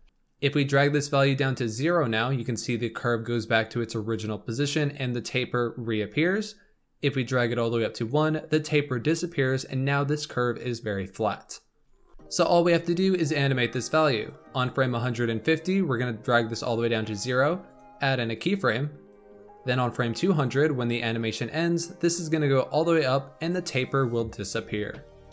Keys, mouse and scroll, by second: 0.0 shift+middle click, 0.5-3.6 drag, 6.9-10.0 drag, 13.8-17.7 drag, 19.0-25.0 drag, 25.1 click.